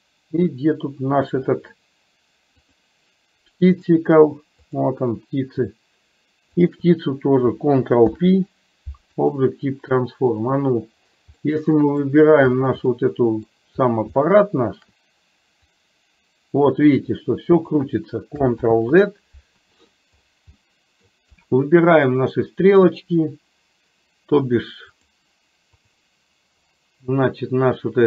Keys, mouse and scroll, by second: 2.7 click, 4.7 click, 6.7 shift+click, 8.1 ctrl+p, 10.5 click, 11.6-12.1 middle drag, 13.0-13.7 middle drag, 14.2 shift+middle click, 16.0-17.8 drag, 18.7 ctrl+z, 20.7-21.3 middle drag, 25.1 click.